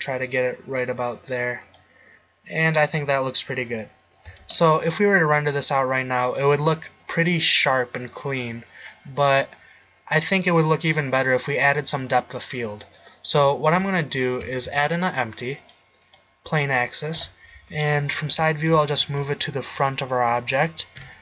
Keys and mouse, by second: 3.2 middle click, 3.8 middle click, 4.5 shift+z, 10.4 middle click, 13.8 z, 14.6 shift+a, 17.2 KP_3, 19.1 g, 21.0 KP_1.